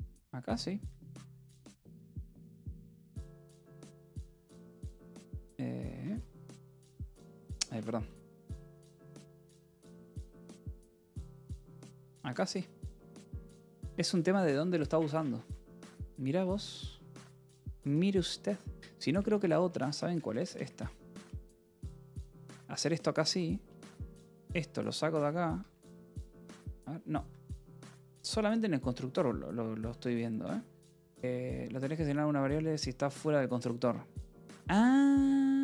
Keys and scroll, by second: 0.0-4.5 typing, 5.9-10.6 typing, 7.6 Escape, 10.9 Escape, 11.9 ctrl+s, 12.1-16.0 typing, 13.9 Escape, 17.3-25.6 typing, 24.4 Escape, 27.2 u, 30.6 ctrl+r, 30.9 j, 31.4 Escape, 33.7 k, 34.1 j, 34.6 k.